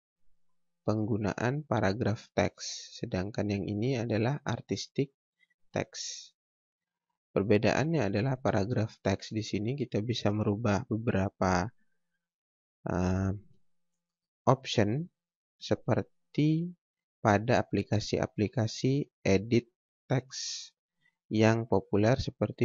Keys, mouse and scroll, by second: 3.2-3.9 scroll down 1, 3.9 scroll up 1, 6.3-6.7 scroll down 1, 8.3 click.